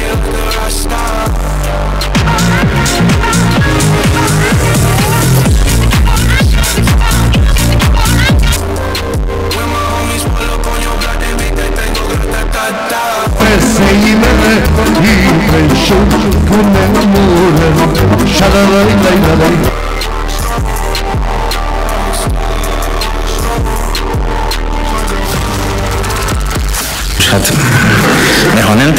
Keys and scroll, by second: 9.0 Page_Down, 19.7 Page_Down.